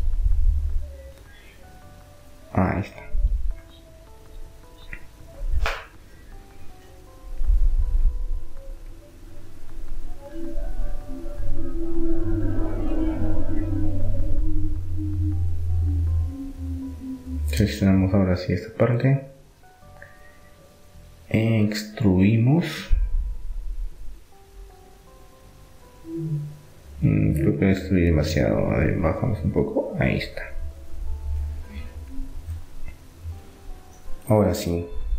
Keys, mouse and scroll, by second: 0.9 middle click, 1.1 click, 1.8 right click, 1.9 middle click, 2.6-3.6 right drag, 5.3-7.6 right drag, 9.2 s, 13.2 r, 15.2-16.9 middle drag, 16.9-19.6 drag, 19.5-22.6 middle drag, 22.6 e, 23.9-25.9 drag, 26.6-29.2 middle drag, 29.2-30.9 drag, 33.4-35.1 middle drag.